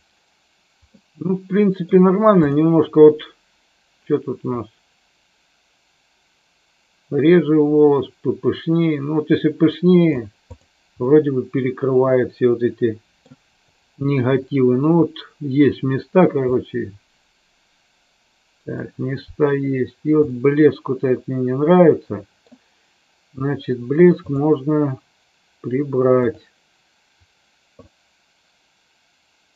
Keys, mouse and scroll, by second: 0.0 click, 0.8-1.9 middle drag, 4.6-10.1 drag, 11.0-13.2 middle drag, 16.5-18.7 middle drag, 20.2-22.3 middle drag.